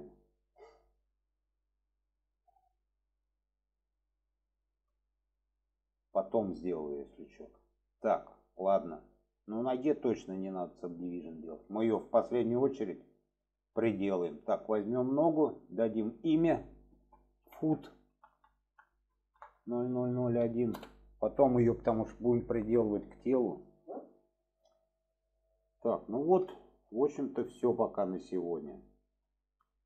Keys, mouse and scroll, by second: 4.5 shift+middle click, 7.2 shift+middle click, 8.0 shift+middle drag, 8.8-9.3 middle drag, 11.3-11.9 alt+middle drag, 12.2 shift+middle drag, 14.4 click, 15.6 click, 15.9-24.5 drag, 25.3-25.7 shift+middle drag, 26.5 shift+middle click, 27.5-27.8 shift+middle drag, 28.3 shift+middle click.